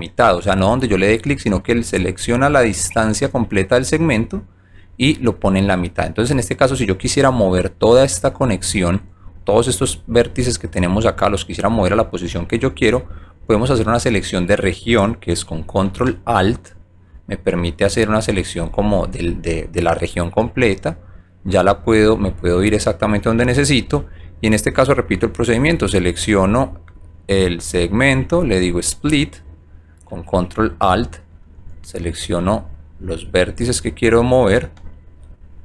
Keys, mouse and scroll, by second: 9.0 alt+right click, 10.3-11.5 alt+drag, 11.8 alt+middle click, 12.5 alt+right click, 13.0 alt+click, 13.4 alt+right click, 16.1-17.1 alt+drag, 18.5-20.0 drag, 20.4 alt+middle click, 21.5 alt+right click, 22.3-23.8 alt+drag, 24.5 click, 25.5 click, 26.2 click, 26.8 click, 27.4 click, 28.8 click, 30.2-31.3 alt+drag, 31.7 alt+right click, 32.6-33.1 alt+drag, 34.8-35.3 ctrl+drag.